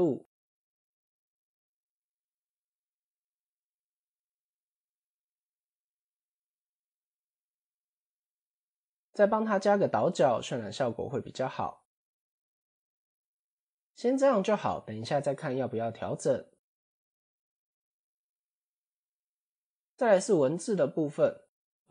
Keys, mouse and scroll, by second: 0.9 click, 1.6-3.2 drag, 5.1 ctrl+a, 6.9-7.4 middle drag, 7.6 scroll up 1, 9.7 click, 10.6 middle click, 11.0-11.5 scroll up 3, 13.5 ctrl+2, 13.8 middle click, 15.2-15.7 middle drag, 15.7 scroll down 4, 16.4-17.2 right drag, 18.1 KP_7, 18.7-19.1 scroll up 2, 19.5 click, 20.6-21.0 middle drag.